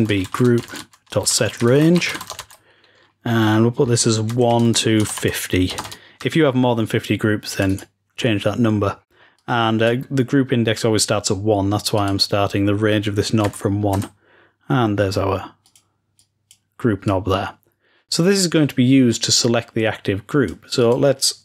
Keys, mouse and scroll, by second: 7.4 click, 9.3 click, 11.9 click, 15.6 click, 16.1-21.4 drag.